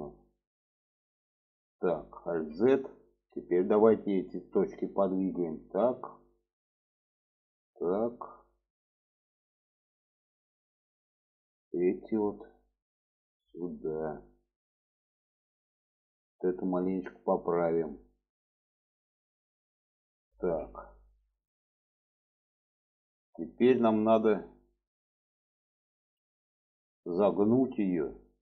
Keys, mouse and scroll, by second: 2.3 alt+z, 2.7 middle click, 3.8 click, 4.6-5.6 drag, 6.2 click, 7.0-8.2 drag, 8.4 shift+middle click, 9.5 shift+middle click, 11.0 click, 13.4-15.7 drag, 16.1 shift+middle click, 17.1 click, 18.0-19.2 drag, 20.3 alt+z, 21.2-23.8 middle drag, 24.0-26.1 middle drag, 27.0 middle click, 28.2 middle click.